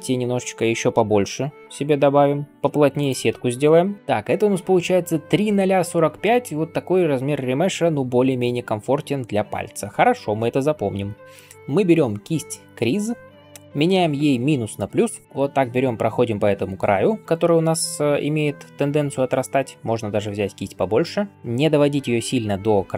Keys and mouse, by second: 3.9 ctrl+r, 14.9 right click, 15.2 [, 17.8-22.9 drag, 17.8-22.9 middle drag, 17.8-22.9 right drag, 18.5 ], 18.6 ], 18.8 ].